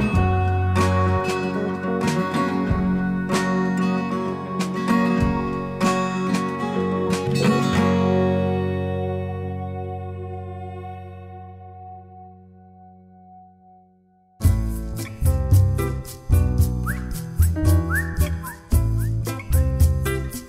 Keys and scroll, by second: 0.0-0.2 typing, 1.4 d, 3.0 d, 5.5 d.